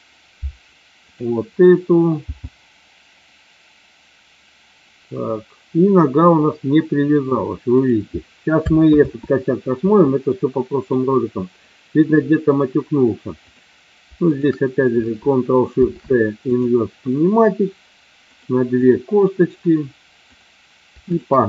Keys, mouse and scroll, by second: 1.0 click, 2.3 g, 9.0 ctrl+z, 10.3 middle click, 13.4 click, 14.3 shift+click, 15.6 ctrl+shift+c, 18.6 click, 20.3 click, 21.0 shift+click.